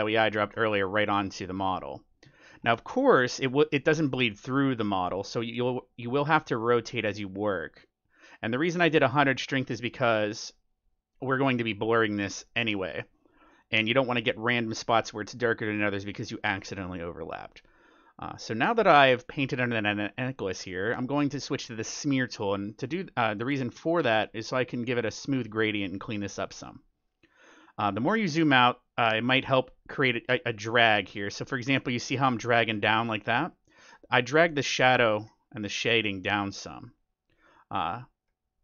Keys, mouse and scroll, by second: 0.5 ctrl+z, 0.9-2.5 middle drag, 4.6 middle click, 4.8 middle click, 5.0 middle click, 6.2-7.2 middle drag, 7.1-9.0 drag, 9.3 middle click, 9.8 middle click, 10.1-12.8 middle drag, 11.8-13.5 drag, 13.0-14.8 middle drag, 13.6 click, 15.3-18.6 middle drag, 19.4-21.2 middle drag, 21.4-23.0 drag, 22.5-27.4 middle drag, 23.1 click, 27.4-28.6 scroll down 1, 28.6-29.1 scroll up 1, 29.1 middle click, 29.9-33.9 drag, 32.8-34.6 middle drag, 34.6-38.6 drag, 35.0-37.2 middle drag, 37.8-38.6 middle drag.